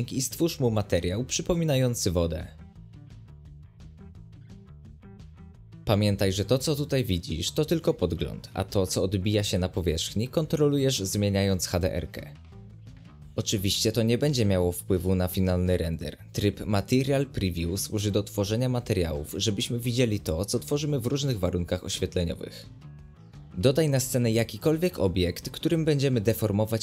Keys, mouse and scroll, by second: 0.2 right drag, 0.3-1.6 shift+middle drag, 1.6-3.2 drag, 3.2 middle click, 3.7 click, 4.4 scroll down 1, 4.5-9.2 middle drag, 9.2-10.5 drag, 23.6 shift+a, 23.9 middle click, 24.3 g, 26.4 g.